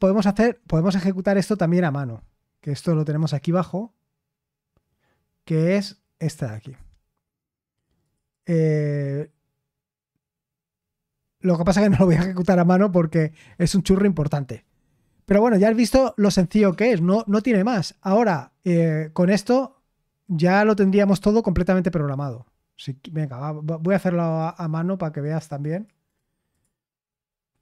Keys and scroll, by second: 15.9-17.6 typing, 20.1 typing.